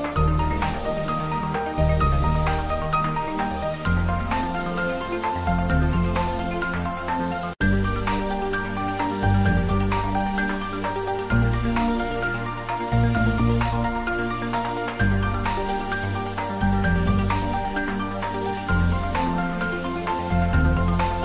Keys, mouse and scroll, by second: 0.3 s, 1.5 click, 1.6 Tab, 1.9 shift+z, 2.6 Tab, 3.3 shift+z, 4.0 s, 4.7 click, 5.9 s, 6.6 click, 7.1 g, 7.7 click, 9.1 g, 9.9 click, 10.2 Tab, 10.6 shift+z, 11.2 ctrl+middle click, 11.9 ctrl+s, 12.2 click, 12.6 ctrl+s, 13.6 ctrl+3, 13.8 shift+middle click, 14.7 click, 14.9-17.4 middle drag, 17.4 click, 18.7 r, 19.2 click, 19.8 g, 20.3 click.